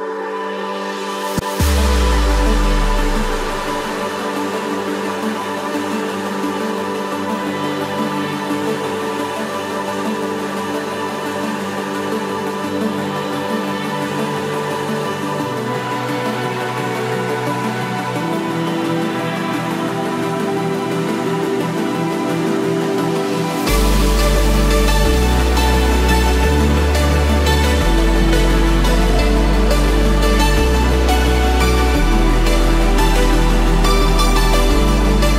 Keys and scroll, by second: 8.6 ctrl+=, 24.4 ctrl+=, 27.7 ctrl+-.